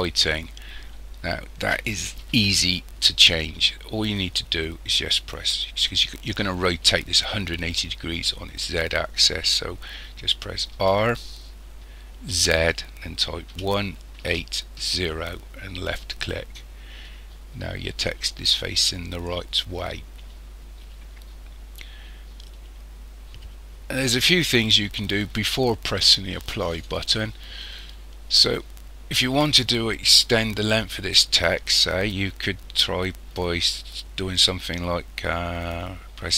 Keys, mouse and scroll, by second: 10.7 r.